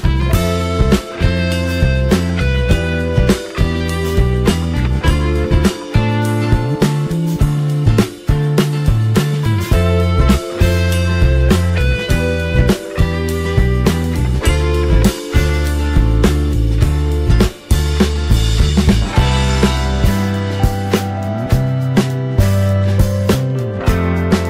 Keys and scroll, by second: 4.9 ctrl+z.